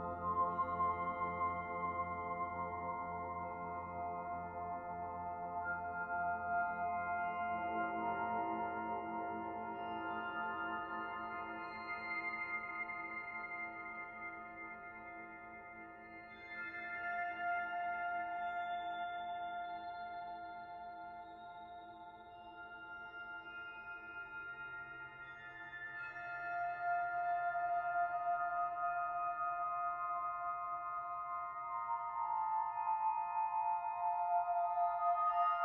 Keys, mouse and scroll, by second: 1.3 middle click, 2.8 click, 3.1 middle click, 4.3 shift+click, 5.5 Delete, 7.2 click, 7.6-8.3 scroll up 1, 8.5 alt+click, 10.2 alt+shift+click, 11.6 ctrl+e, 13.9 middle click, 15.8 alt+click, 16.2 middle click, 17.5 alt+shift+click, 19.0 ctrl+e, 21.9 middle click, 22.4 alt+click, 22.8 middle click, 24.1 alt+click, 26.3 alt+shift+click, 27.9 ctrl+e, 29.9-31.0 scroll down 2, 30.3 middle click, 32.2 Tab, 32.5-32.9 scroll down 3, 32.9 middle click, 33.9-34.4 scroll down 3, 34.4 middle click.